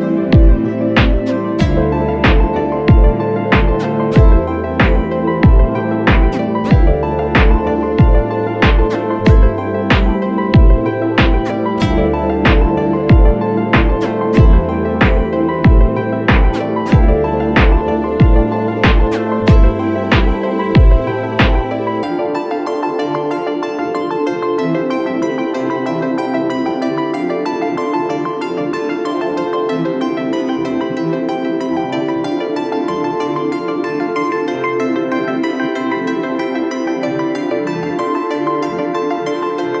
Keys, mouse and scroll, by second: 3.2 ctrl+-, 3.3 ctrl+-, 3.8 ctrl+-, 5.0 ctrl+Return, 7.0 alt+BackSpace, 31.4 ctrl+-, 35.7-36.3 scroll up 1, 36.4-37.2 alt+scroll down 1.